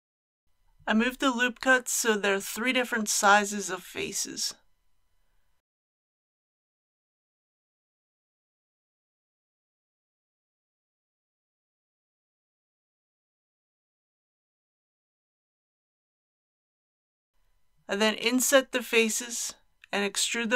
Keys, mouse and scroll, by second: 0.6 alt+click, 2.3 g, 2.6 g, 6.8 click, 8.0 alt+click, 9.0 alt+g, 9.1 alt+g, 12.5 click, 14.4 alt+a, 16.4 3, 17.6 click, 18.3 shift+click, 19.3 shift+click.